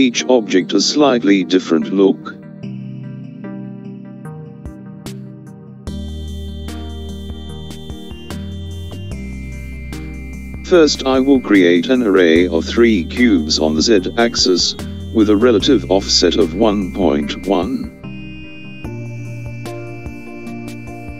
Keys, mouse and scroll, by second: 19.7 click.